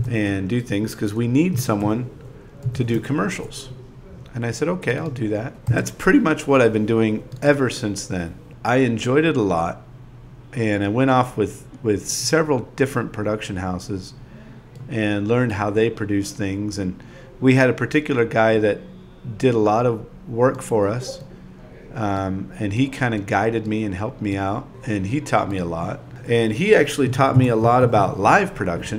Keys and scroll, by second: 0.7 ., 0.8 Return, 1.4 5.